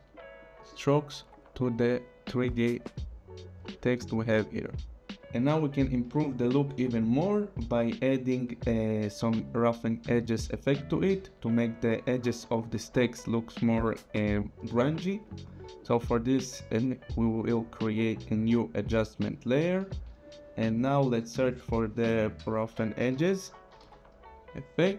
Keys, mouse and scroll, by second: 0.3 click, 1.5 click, 5.2 click, 16.7 right click, 19.3 click, 21.4 click, 22.8-24.4 typing.